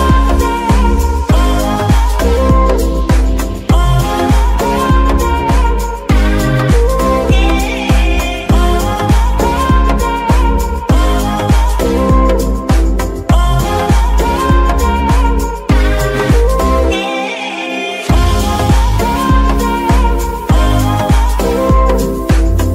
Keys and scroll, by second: 8.3 KP_0, 8.8 Return, 10.1 KP_0, 10.2 Return, 20.3 KP_1, 20.7 KP_0, 20.8 KP_0, 21.1 Return.